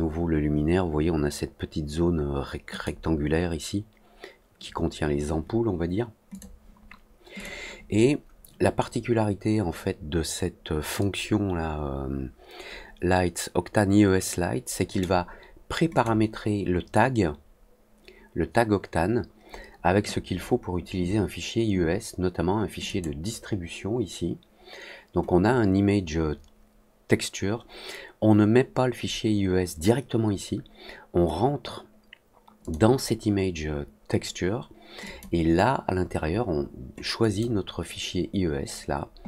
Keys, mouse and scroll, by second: 2.6 click, 6.2 click, 7.3 click, 10.9-14.9 drag, 15.9 click, 22.8 click, 32.6 click, 35.0 click, 37.1 click.